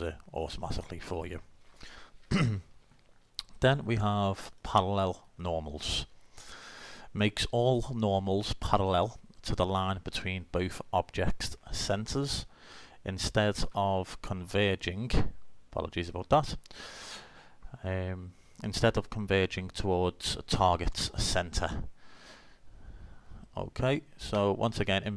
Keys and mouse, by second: 1.0-3.5 middle drag, 5.8 click, 6.9 click, 7.0 middle click, 7.1 click, 7.2 middle click, 7.2 click, 7.2 middle click, 16.1 click.